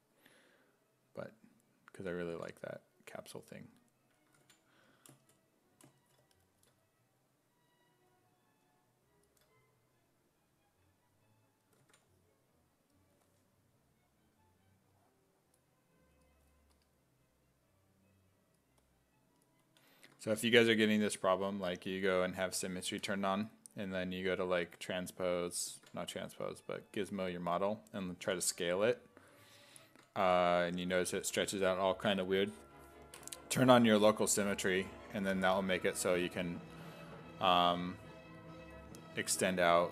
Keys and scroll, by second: 11.8 ctrl+z, 25.8 ctrl+z, 28.2 ctrl+z, 29.9 ctrl+z.